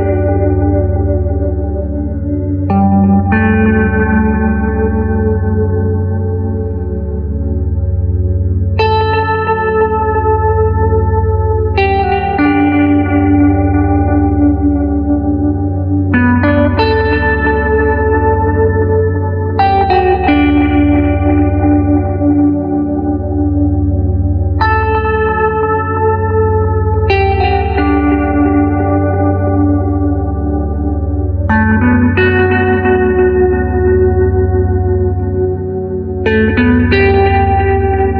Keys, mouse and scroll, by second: 0.0 click, 0.6 middle click, 0.7 click, 0.8 middle click, 1.8-4.4 middle drag, 6.1 click, 10.0 click, 14.6-16.7 middle drag, 16.7 KP_Decimal, 17.4-19.6 middle drag, 19.8-22.0 middle drag, 24.0-26.1 middle drag, 26.9 click, 30.7 click, 37.1 click.